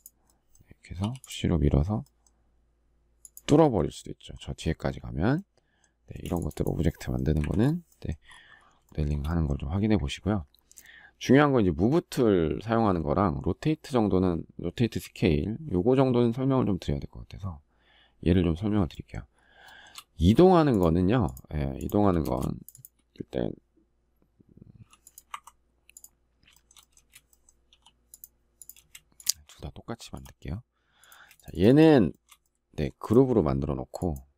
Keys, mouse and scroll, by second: 5.8 space, 8.6 shift+middle click, 19.4 shift+middle click, 21.9 space, 26.2 shift+middle click, 26.7 space, 27.5 p, 28.5 space, 29.9 p, 30.9 space, 31.8 shift+middle click.